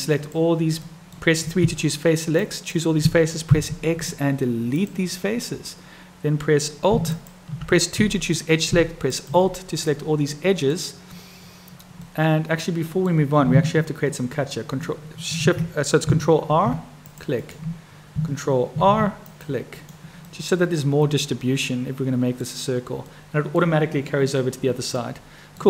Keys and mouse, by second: 0.0 click, 0.8 click, 1.5 3, 2.5 click, 7.0 alt+click, 9.0 alt+click, 10.0 click, 12.1-13.1 drag, 16.4 ctrl+r, 18.7 ctrl+r, 20.3-22.4 drag, 23.2 click, 25.0 click.